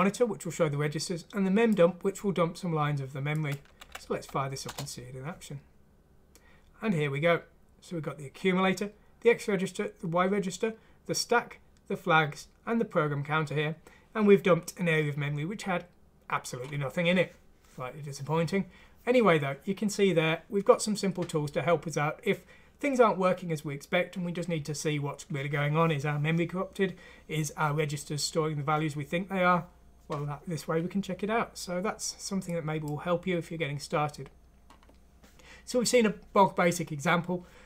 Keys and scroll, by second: 3.8 F6, 4.7 Return.